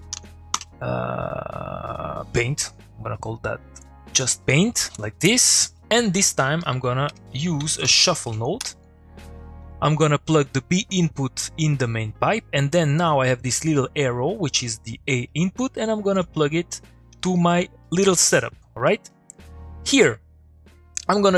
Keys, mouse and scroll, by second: 3.8-4.4 drag, 6.2 middle click, 6.6 click, 7.1 Tab, 7.5 s, 8.3 Down, 8.6 Return, 9.2 middle click, 9.6 click, 9.8 middle click, 11.0-11.9 click, 12.9-14.5 click, 15.1 middle click, 15.4 click, 17.8 middle click.